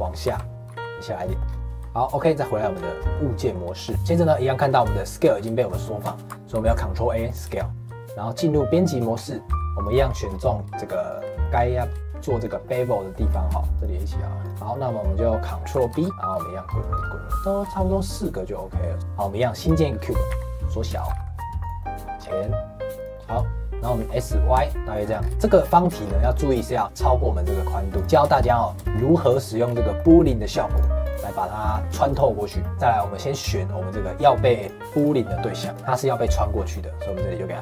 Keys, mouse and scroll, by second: 0.2 e, 0.5 middle click, 0.6 g, 1.3 shift+middle click, 1.8 Tab, 2.9-6.5 middle drag, 6.5 ctrl+a, 7.5 shift+middle click, 7.8 Tab, 9.1-9.4 scroll up 3, 9.4 2, 9.8 click, 10.0 scroll down 2, 10.3 middle click, 11.0 shift+click, 11.4 middle click, 12.3 shift+click, 12.6-13.7 middle drag, 13.7 shift+click, 14.4 shift+click, 14.7-15.9 middle drag, 15.9 ctrl+b, 19.0 shift+a, 20.2 s, 21.7 middle click, 22.1 g, 23.1 middle click, 23.9 s, 24.7 middle click, 25.1-25.9 scroll up 3, 25.3 shift+middle click, 25.9 shift+middle click, 26.8 click, 27.9 click, 28.1 scroll down 1, 28.3 shift+middle click, 29.1 scroll down 1, 29.4 middle click, 29.6-29.9 scroll up 2, 29.9 middle click, 30.7 click, 31.0 click, 31.2 click, 31.6 click, 31.8 click, 32.1 click, 32.6 shift+middle click, 33.3 click, 34.5 click, 34.9 click, 35.7-37.6 drag.